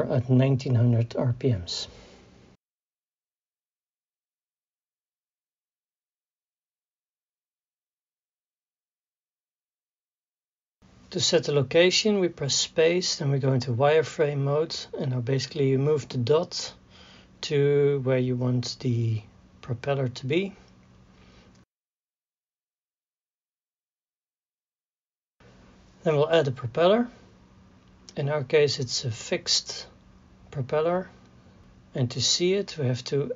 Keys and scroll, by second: 3.6 KP_1, 4.0 KP_9, 4.5 KP_0, 7.7 KP_1, 8.0 KP_9, 8.1 KP_0, 13.2 space, 32.2 a.